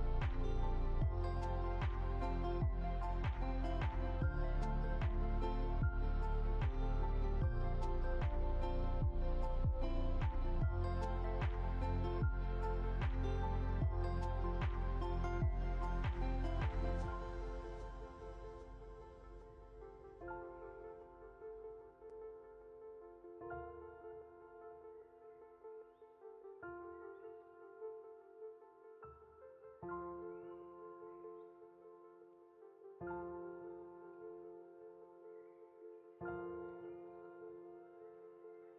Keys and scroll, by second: 5.7 Delete, 32.2 ctrl+z.